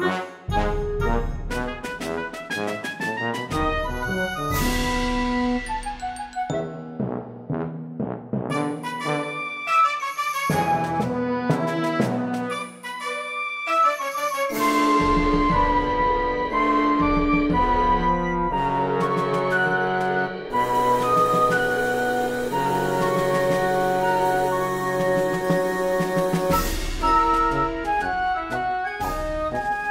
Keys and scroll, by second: 1.2 space, 4.7 space, 5.9 space, 7.8 space, 8.9 e, 10.2 ctrl+z, 11.8 p, 14.8 space, 16.6 space, 17.1 space, 18.3-19.2 typing, 22.0 space, 23.6 space, 25.9 e, 26.4 space, 27.0 space, 29.8-29.9 typing.